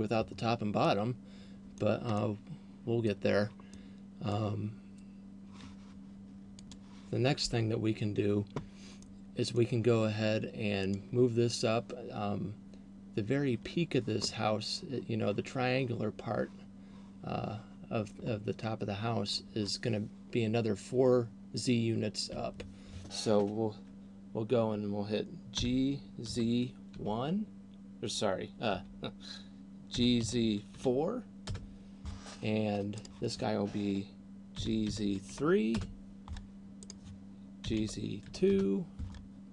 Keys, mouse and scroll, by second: 0.7 middle click, 2.0 middle click, 3.7 middle click, 9.2 middle click, 11.0 right click, 26.0 g, 30.2 g, 33.2 right click, 34.7 g, 37.0 right click, 38.0 g.